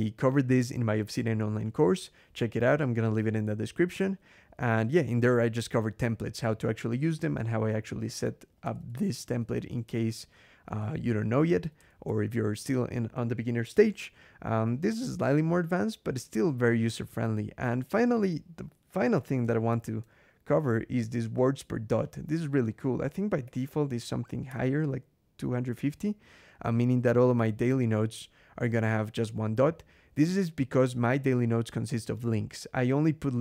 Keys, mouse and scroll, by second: 6.8-9.3 typing, 8.4 Escape, 9.6 Escape, 10.5 Escape, 10.5-11.8 typing, 19.5 ctrl+,, 21.9-22.4 drag, 22.7-24.0 typing, 24.3 Escape.